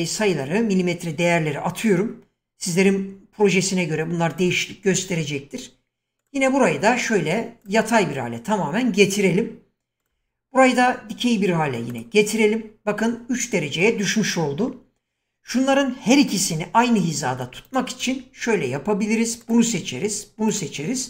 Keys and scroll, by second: 16.4 shift+,.